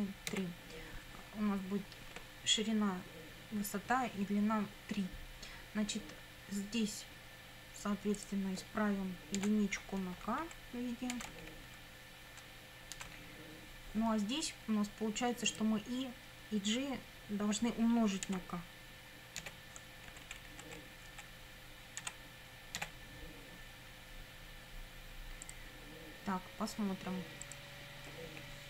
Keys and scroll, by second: 0.0-0.3 typing, 9.4 Delete, 10.2 k, 10.4 Right, 11.1 Delete, 11.3 k, 11.7 Right, 13.0 Delete, 13.1 k, 18.3 *, 19.4 k, 20.1 Right, 22.0 *, 22.8 k.